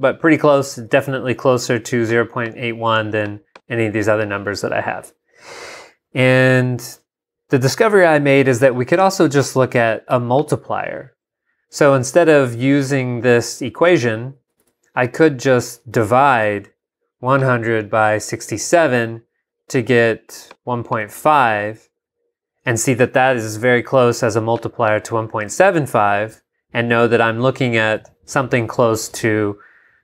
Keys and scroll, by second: 14.6 super+Tab, 16.0 super+Tab.